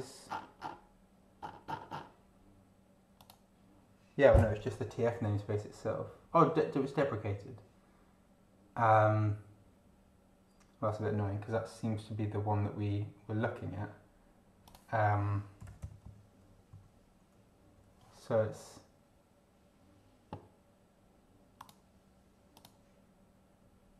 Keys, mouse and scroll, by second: 0.3-0.9 scroll down 2, 1.4-2.2 scroll up 2, 3.1 click, 14.6 click, 15.3-16.7 typing, 21.6 click, 22.5 click.